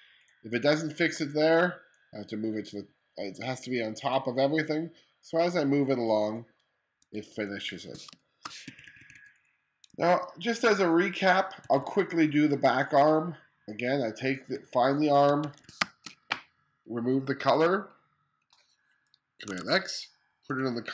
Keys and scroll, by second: 6.6-9.9 typing, 11.2 2, 13.9 1, 15.4 space, 19.1 super+x.